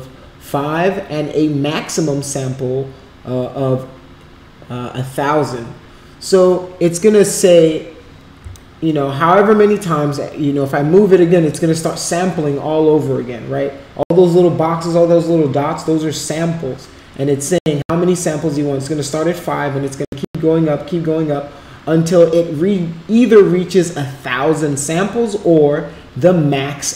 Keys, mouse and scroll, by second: 8.6-11.6 alt+drag.